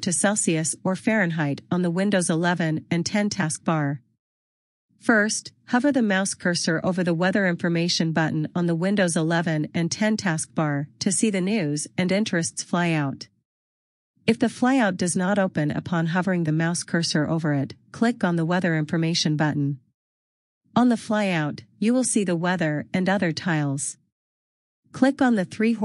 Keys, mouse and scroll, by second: 18.0 click, 22.3 click.